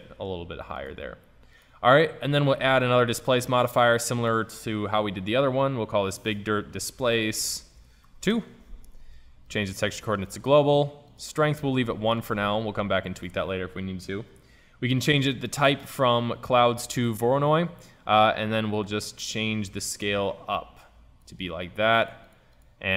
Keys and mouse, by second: 0.8-6.1 drag, 7.6 BackSpace, 7.7 BackSpace, 10.7-14.1 drag, 15.1-17.0 drag, 18.9-20.8 drag, 22.0-22.9 drag.